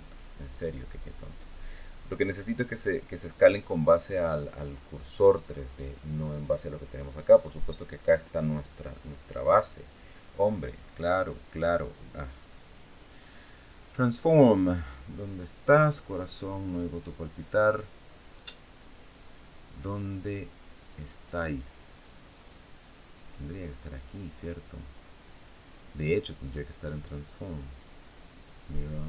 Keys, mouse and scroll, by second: 12.1 click, 21.2 click.